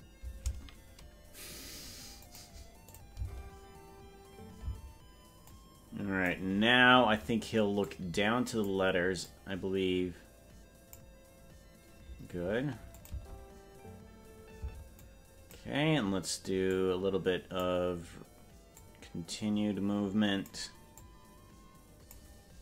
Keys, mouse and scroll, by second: 2.3 click, 2.9 click, 3.2 space, 4.8 space, 5.5 click, 7.8 click, 9.2-11.0 drag, 13.0 click, 13.2 space, 14.8 space, 15.0 click, 16.7-17.7 drag, 18.7-20.5 drag, 21.0-22.2 drag.